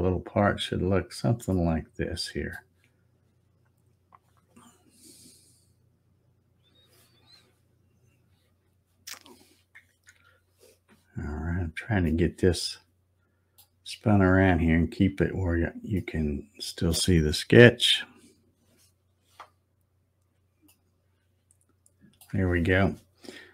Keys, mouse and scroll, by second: 0.1 scroll up 3, 0.7-1.2 scroll down 2, 1.5-2.0 scroll up 1, 2.0 middle click, 3.1 scroll up 1, 5.6 scroll up 1, 6.1 middle click, 10.1 z, 12.0-13.6 middle drag, 14.8-15.4 scroll up 2, 15.9-16.9 middle drag, 20.7-22.3 shift+middle drag.